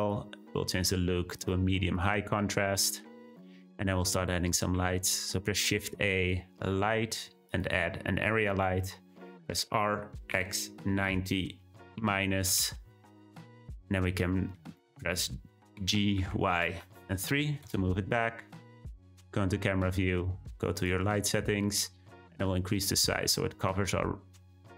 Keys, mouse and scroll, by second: 1.6-2.0 drag, 4.7 shift+a, 8.1-9.6 scroll down 1, 9.6 r, 13.5-14.1 middle drag, 14.1 scroll down 1, 14.2-15.0 middle drag, 15.0-15.8 scroll down 2, 15.8 g, 18.1 `, 20.7 click, 22.4-24.7 drag.